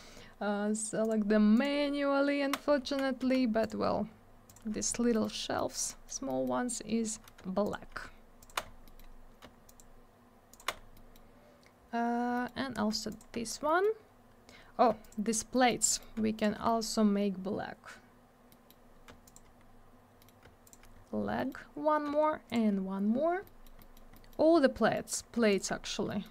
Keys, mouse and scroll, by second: 1.0 ctrl+click, 1.1 ctrl+click, 1.5 ctrl+click, 1.6 ctrl+click, 2.8 ctrl+z, 3.6 ctrl+click, 4.5 ctrl+click, 4.9 scroll down 1, 5.1 middle click, 5.2 middle click, 5.6 middle click, 5.7 double middle click, 5.9 middle click, 6.0 middle click, 6.3 middle click, 6.4 double middle click, 6.6 scroll up 1, 7.6 ctrl+click, 8.4 ctrl+click, 8.6 scroll down 1, 8.8 middle click, 9.1 scroll up 1, 9.7 ctrl+click, 10.5 ctrl+click, 10.6 ctrl+click, 10.7 scroll down 1, 10.9 middle click, 11.1 middle click, 12.3 middle click, 12.4 middle click, 12.6 scroll up 1, 13.1 ctrl+click, 13.2 ctrl+click, 13.4 scroll down 1, 13.7 middle click, 13.8 middle click, 14.5 scroll up 1, 15.0 ctrl+click, 15.5 middle click, 15.7 middle click, 15.9 middle click, 16.0 double middle click, 16.4 ctrl+click, 16.4 ctrl+click, 16.7 middle click, 16.8 double middle click, 18.5 middle click, 18.7 middle click, 19.2 ctrl+click, 19.3 ctrl+click, 19.6-20.2 scroll down 1, 20.2 middle click, 20.2 scroll up 1, 20.6 ctrl+click, 20.7 ctrl+double click, 20.9 scroll down 1, 21.4 middle click, 21.5 middle click, 22.5 ctrl+click, 22.5 ctrl+click, 23.4 middle click, 23.9 double middle click, 24.1 middle click, 24.3 middle click, 24.6 scroll down 1, 24.7 middle click, 24.9 middle click, 25.5 ctrl+click, 26.1 middle click.